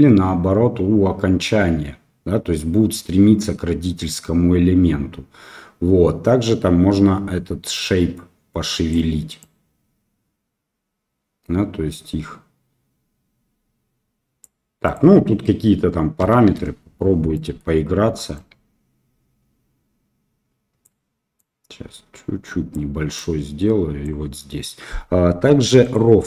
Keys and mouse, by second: 9.4-14.4 drag, 14.8-16.9 drag, 17.3 middle click, 18.3-20.9 drag, 21.3-22.7 drag, 23.2 click, 25.8 click.